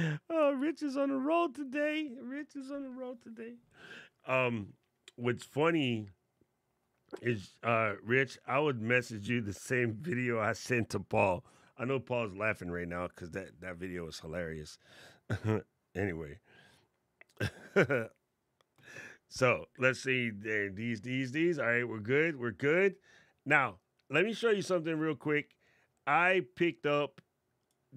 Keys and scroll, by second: 0.3 super+z.